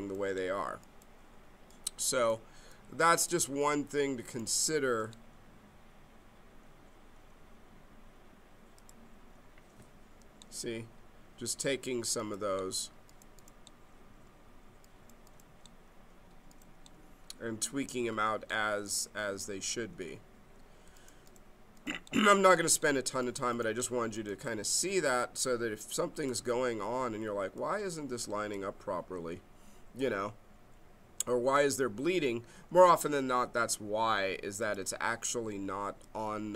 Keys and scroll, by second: 4.9 e.